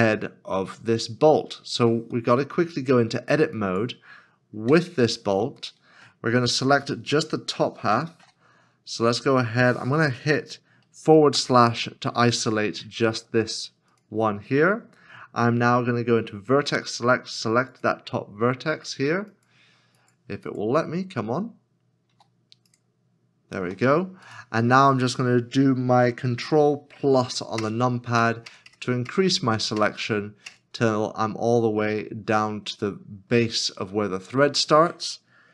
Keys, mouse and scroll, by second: 1.7 scroll up 1, 2.3 middle click, 4.8 Tab, 5.8 middle click, 8.1 shift+z, 11.6 /, 16.6 1, 22.1 c, 24.3 c, 24.3 right click, 27.6 ctrl+KP_Add, 28.2 ctrl+KP_Add, 28.5 ctrl+KP_Add, 28.7 ctrl+KP_Add, 29.1 ctrl+KP_Add, 29.8 ctrl+KP_Add, 30.5 ctrl+KP_Add, 32.2 middle click, 34.8 scroll down 1.